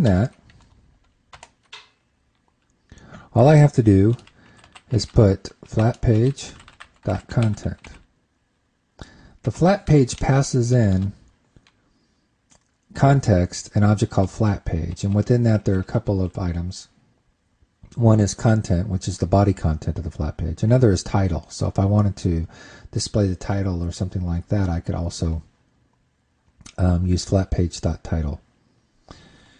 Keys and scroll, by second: 2.0 super+Return.